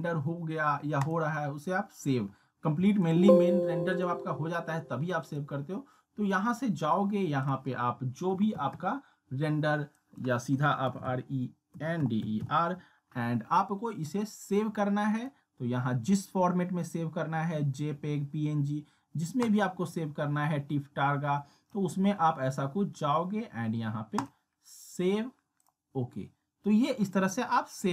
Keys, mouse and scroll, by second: 7.4 click, 10.6-12.9 typing, 14.5 click, 19.4-21.9 drag.